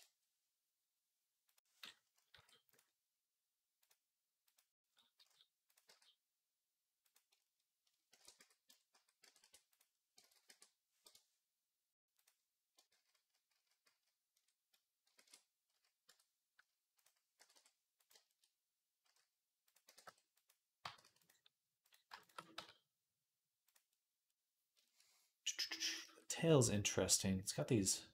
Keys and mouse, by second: 2.1 s, 2.6-3.6 drag, 5.0 s, 5.6-7.2 drag, 5.7 g, 8.0 ctrl+a, 8.5 Tab, 8.7 a, 9.0 e, 10.0 ctrl+z, 10.3 e, 12.7 ctrl+z, 13.0 ctrl+z, 13.3 ctrl+z, 13.7 ctrl+z, 13.7-19.3 drag, 15.0 ctrl+a, 15.9 Tab, 17.2 e, 18.9 s, 19.7 g, 20.6 g, 22.4 s, 23.7-25.8 right drag, 25.8-27.4 shift+middle drag, 27.4-28.1 right drag.